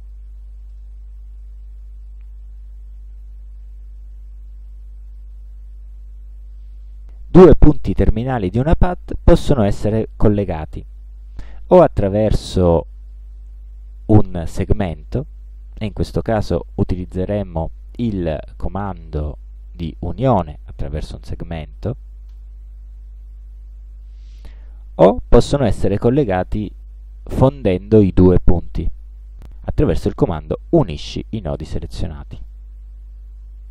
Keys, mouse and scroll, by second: 0.7 shift+right click, 5.1 click, 12.5 click, 22.3 click, 25.3 click, 32.5 click.